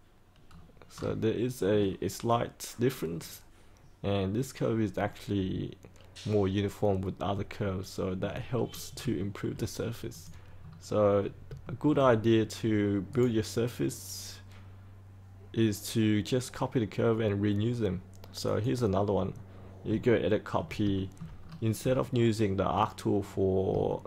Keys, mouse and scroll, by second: 0.4-0.8 scroll down 1, 6.8-7.3 scroll up 1, 7.6 alt+middle click, 8.5-8.9 scroll up 1, 9.1 shift+middle click, 10.0 click, 10.5-11.1 scroll down 1, 11.1 scroll up 1, 11.6 shift+middle click, 13.0 right click, 18.4 click, 19.5-19.8 scroll up 1, 20.0 alt+middle click, 20.9 shift+middle click, 21.3-21.7 scroll down 1, 23.8 shift+middle click.